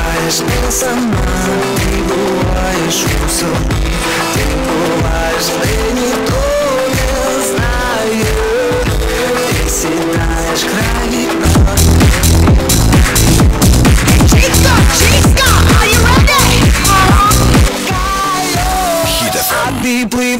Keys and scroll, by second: 0.7 Return, 17.7 Page_Down.